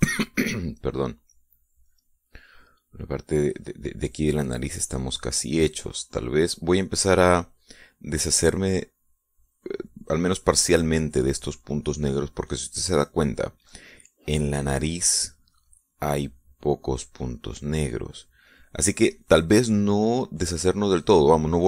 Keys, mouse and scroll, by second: 1.6 click, 2.8-4.3 drag, 5.2-10.2 drag.